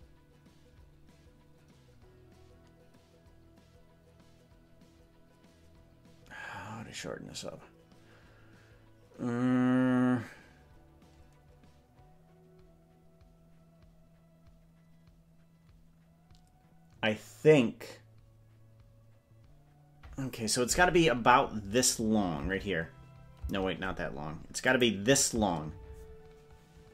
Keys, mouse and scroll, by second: 22.0 click, 22.6 space, 23.6 space, 24.8 click, 25.4 space.